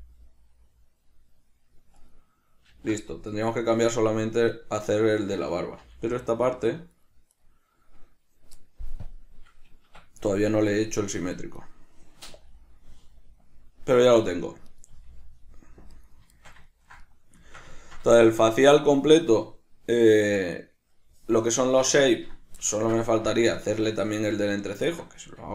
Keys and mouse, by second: 0.1 g, 2.4 right click, 3.0 alt+g, 3.6 right click, 4.6 right click, 5.0 right click, 6.1 g, 7.6 right click, 9.3-11.8 drag, 10.2 Escape, 11.8 right click, 12.6 g, 15.0 right click, 15.2 g, 16.3 right click, 16.6-21.8 shift+middle drag, 21.8 right click, 23.0-25.5 ctrl+middle drag.